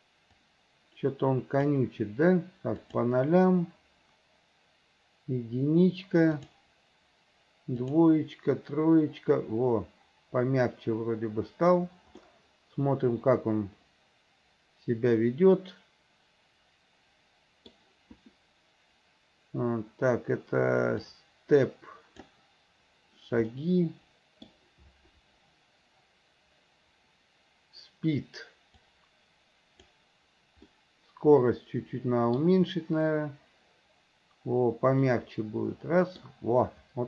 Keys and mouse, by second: 0.5-1.9 drag, 2.9 click, 6.5 click, 7.9 click, 12.4-17.9 middle drag, 21.2-22.4 drag, 23.7-24.7 middle drag, 28.9-30.0 drag, 30.9-32.5 middle drag, 35.2-36.4 middle drag.